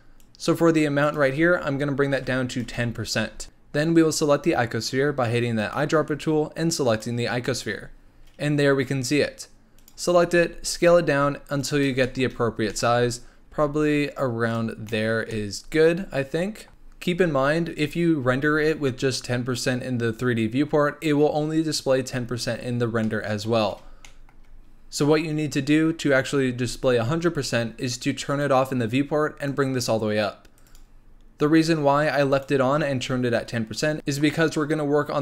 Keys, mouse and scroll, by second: 0.2 click, 1.0-3.4 drag, 5.6 click, 9.7 click, 10.4 s, 12.0 shift+middle drag, 12.3-12.6 scroll up 3, 12.7-13.1 middle drag, 13.1-13.6 scroll up 1, 13.6 s, 14.7 scroll down 4, 14.8 middle drag, 15.0 scroll up 1, 15.3-16.7 middle drag, 22.6-23.0 scroll up 2, 23.0 middle click, 23.5-24.0 scroll down 1, 24.0-28.3 shift+middle drag, 28.3 click, 29.4-30.7 drag, 32.4 click.